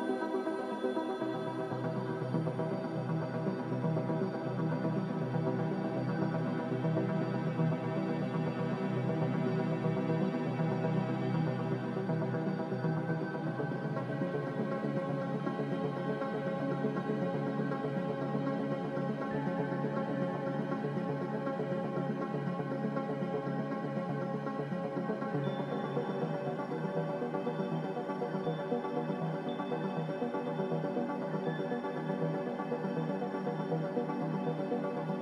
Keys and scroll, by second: 10.0-10.8 typing, 13.5 ctrl+k, 16.9 ctrl+z, 20.4-21.1 typing, 22.0 ctrl+k.